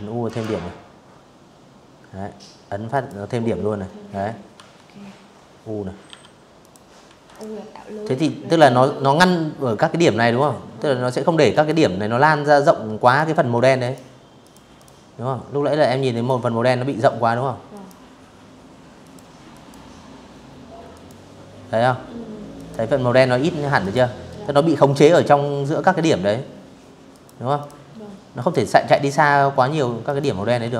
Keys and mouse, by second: 0.6 click, 2.2 v, 3.7 u, 4.2 click, 4.7 v, 4.9 click, 5.7 a, 9.2 click, 10.7 click, 11.0 a, 11.5 click, 12.1 click, 12.4 click, 13.4 a, 13.8 click, 15.4 click, 16.7 click, 17.2 click, 18.6 click, 20.2 click, 21.4 click, 24.8 click, 25.2 click, 26.0 click, 27.7 click, 28.3 v, 28.4 click, 28.8 a, 29.3 click, 29.8 click, 30.6 click.